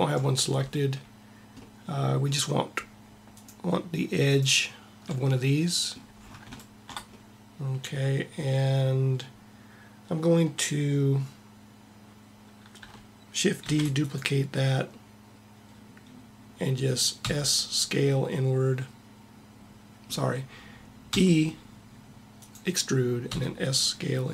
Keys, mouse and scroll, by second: 13.5 shift+d, 17.0 s, 17.1 s, 20.8 e, 23.1 s.